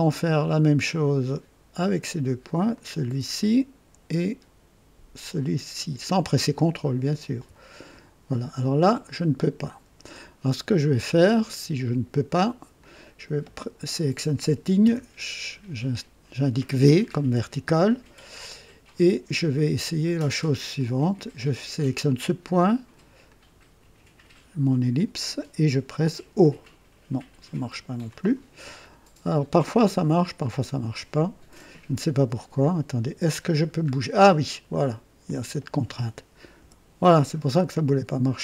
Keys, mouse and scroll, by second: 2.7 click, 3.4 right click, 6.0 click, 7.3 c, 9.3 click, 12.7 click, 14.8 v, 20.7 click, 23.2 click, 26.3 typing, 28.1 click, 28.7 scroll up 1, 30.6 click, 32.6-33.2 drag, 33.6 scroll down 1, 35.2 click, 36.6 Delete.